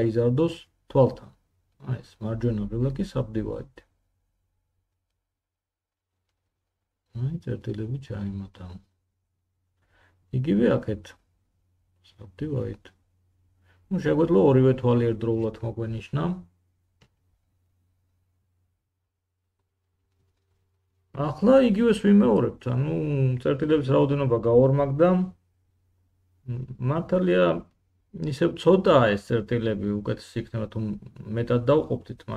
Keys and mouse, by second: 7.9 1, 12.1 3, 12.5 middle click, 16.4 1, 25.0 Tab, 28.3-32.3 middle drag.